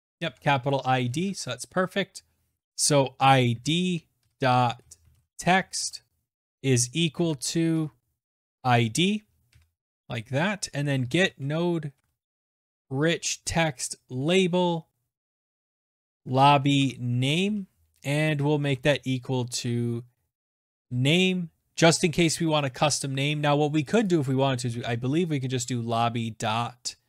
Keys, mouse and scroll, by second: 1.6 Right, 2.3-16.7 typing, 10.0 Tab, 18.1-19.7 typing, 22.0 click, 22.1 click, 22.5-24.1 typing, 24.7-25.4 scroll, 25.9-27.0 scroll.